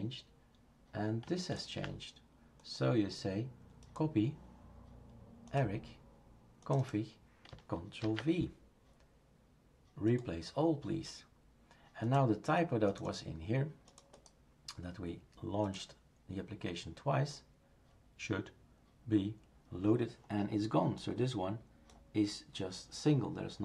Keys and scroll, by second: 8.0 ctrl+v.